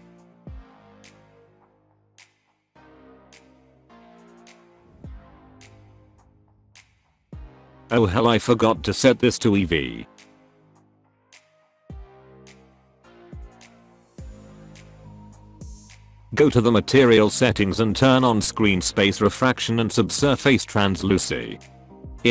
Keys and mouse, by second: 4.2 click, 10.0-11.0 drag, 16.2 click, 18.4 click, 19.8 click, 21.7 click.